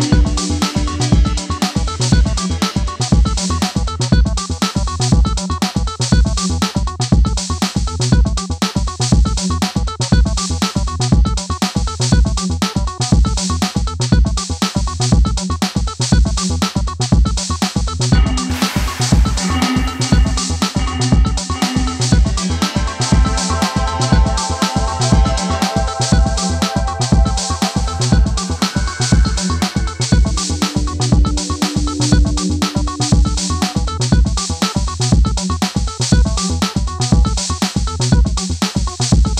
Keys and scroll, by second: 1.1-2.0 typing, 7.7 Return, 11.8 Delete, 24.4 Return, 25.8 Return, 27.2-28.0 typing, 28.2 Return.